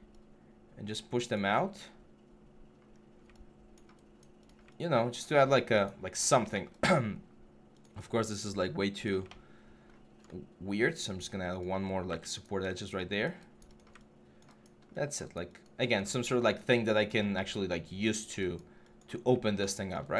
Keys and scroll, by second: 6.2 alt+1, 11.6 3, 11.9 g.